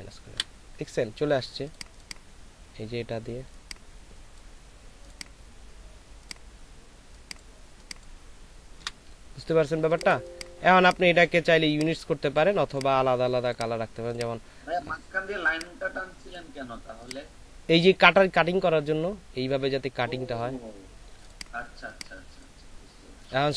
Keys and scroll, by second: 8.8 Delete, 9.7 alt+space, 11.4 space.